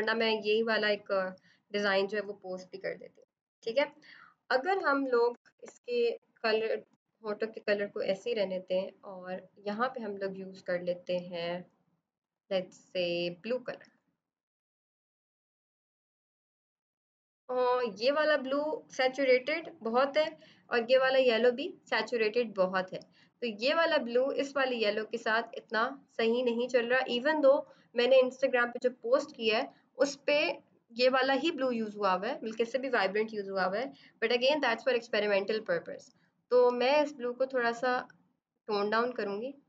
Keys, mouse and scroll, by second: 4.5 ctrl+Caps_Lock, 4.7-5.6 typing, 6.8 typing, 7.5 click, 12.1 click, 20.6 click, 23.5 click, 36.5 click.